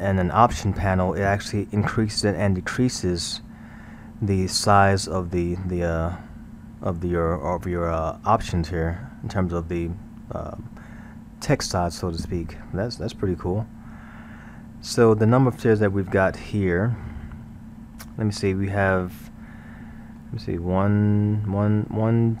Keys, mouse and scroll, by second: 7.8-9.1 scroll, 15.0-15.4 scroll, 15.4-18.0 middle drag, 18.0-19.5 scroll, 19.5-22.4 middle drag.